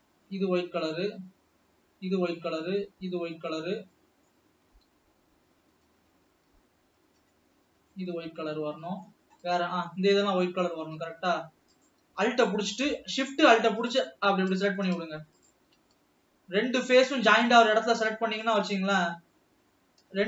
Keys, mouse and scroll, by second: 0.0 l, 1.8 l, 2.4 l, 3.7 l, 4.1-4.7 middle drag, 4.7-5.1 scroll up 2, 6.0 l, 6.6 l, 7.1 l, 7.4-7.7 scroll down 3, 7.8-9.2 middle drag, 9.2-9.9 scroll up 6, 9.9-11.9 middle drag, 11.9 alt+shift+click, 13.0 alt+shift+click, 13.9 alt+shift+click, 14.7 ctrl+z, 15.6 alt+shift+click, 15.9-16.7 middle drag, 16.7-17.1 scroll up 3, 19.0 alt+shift+click, 19.1-19.5 scroll down 3, 19.5-20.2 middle drag.